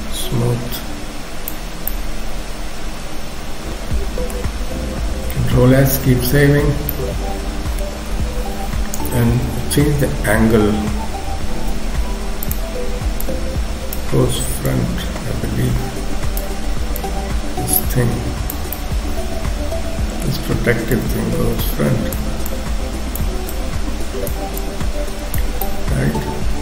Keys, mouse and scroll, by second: 1.7 scroll down 2, 1.9 middle click, 4.5-5.0 scroll down 1, 5.8 ctrl+s, 6.2-6.7 scroll up 1, 6.9 middle click, 8.1 KP_3, 8.7-9.2 scroll up 2, 9.3 k, 11.5 f, 13.3 click, 14.8 click, 18.7 middle click, 21.1 click, 22.6 click, 24.7 click, 25.7 middle click.